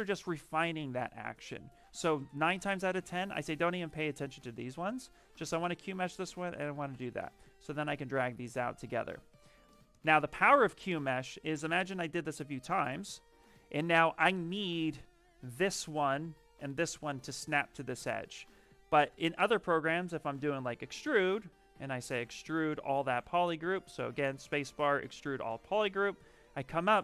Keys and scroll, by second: 19.0 space, 21.9 space, 23.6 space.